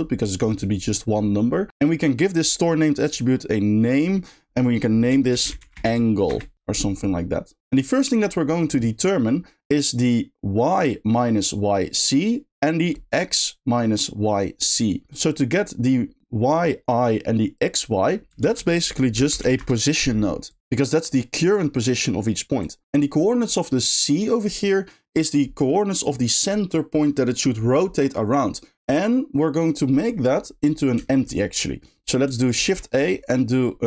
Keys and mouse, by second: 1.9 middle click, 4.1-6.3 drag, 7.9 middle click, 22.6 click, 22.8 click, 31.1 shift+middle click, 32.6 shift+a.